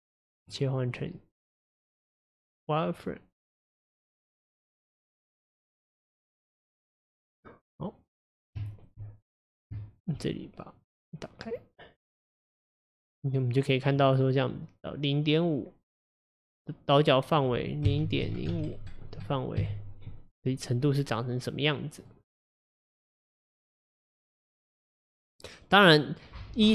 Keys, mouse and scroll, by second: 0.5 click, 1.0-4.0 drag, 4.9-7.8 drag, 7.8-9.3 middle drag, 9.3-9.8 scroll up 1, 9.8-10.8 shift+middle drag, 10.8 click, 11.5 click, 13.5-14.7 middle drag, 14.7-20.4 drag, 21.6-22.8 middle drag, 22.8 click, 23.5-26.5 middle drag.